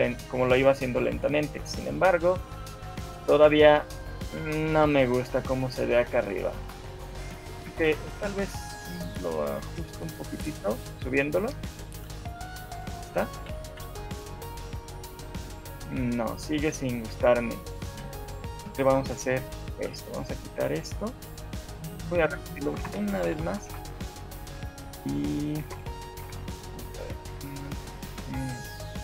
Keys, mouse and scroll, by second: 2.6 alt+a, 4.6 Escape, 5.4 right click, 7.5 shift+middle click, 8.3 scroll up 1, 8.7 shift+middle click, 9.9 click, 12.5 right click, 12.7 right click, 13.5 scroll down 6, 13.7 shift+middle click, 14.1 alt+a, 16.1 Escape, 16.9 click, 17.9 shift+click, 18.7 Delete, 19.9 right click, 21.1 click, 22.1 click, 22.9 Delete, 23.3 Left, 23.5 Left, 23.7 Left, 23.9 Left, 25.7 Right, 25.9 Right, 26.3 shift+Left, 27.1 alt+a, 28.5 Escape.